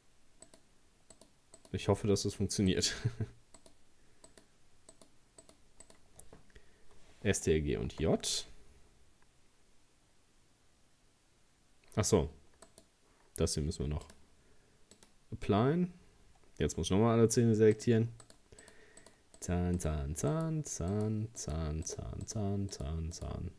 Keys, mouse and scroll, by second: 0.5 shift+right click, 1.2 shift+right click, 1.6 shift+right click, 2.7 shift+right click, 3.6 shift+right click, 4.3 shift+right click, 4.9 shift+right click, 5.4 shift+right click, 5.9 shift+right click, 7.9 ctrl+j, 12.7 right click, 14.1-16.6 drag, 16.6-17.8 scroll up 4, 17.8 shift+right click, 18.2 shift+right click, 18.6 shift+right click, 19.0 shift+right click, 19.4 shift+right click, 19.8 shift+right click, 20.3 shift+right click, 20.9 shift+right click, 21.4 shift+right click, 21.9 shift+right click, 22.3 shift+right click, 22.7 shift+right click, 23.2 shift+right click.